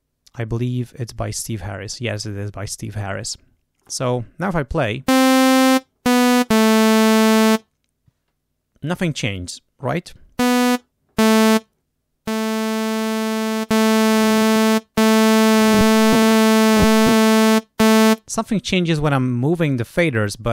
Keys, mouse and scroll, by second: 12.6-13.6 drag, 13.9 click, 16.6-17.6 drag.